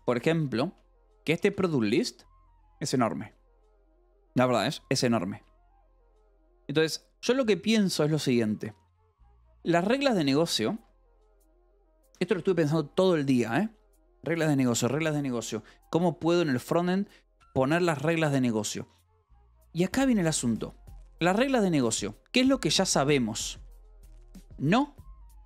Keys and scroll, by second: 0.0-2.0 typing, 5.2 Escape, 5.8 k, 9.2-12.5 typing, 15.2 o, 15.5 Escape, 15.8 k, 16.2 o, 16.3 Escape, 18.5-22.3 typing, 23.5 space, 24.8 space.